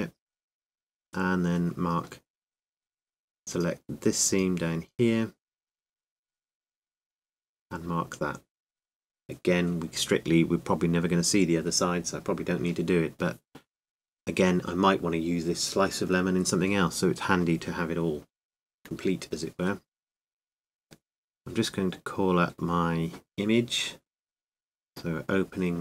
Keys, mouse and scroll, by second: 0.0 space, 3.7 super+right click, 4.5 super+click, 5.5-8.9 super+middle drag, 8.2-11.2 right drag, 9.3 space, 11.6-13.6 middle drag, 13.0-21.5 drag, 23.9-25.8 drag.